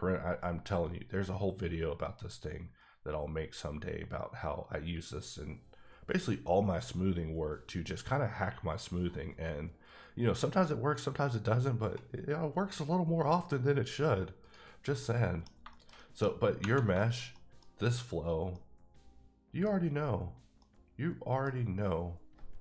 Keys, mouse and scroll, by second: 2.5-3.0 scroll up 9, 3.6 scroll up 2, 4.6-6.9 scroll up 1, 6.9 scroll up 2, 7.6 scroll down 1, 7.9-8.5 scroll up 1, 8.5-9.3 scroll down 3, 9.3-10.1 scroll down 7, 10.6 scroll down 6, 10.8-11.4 scroll up 5, 11.4-12.9 scroll down 3, 14.4 right click, 14.9 middle click, 16.2-16.6 scroll up 2, 16.9 shift+middle click, 18.5 middle click, 20.6 middle click.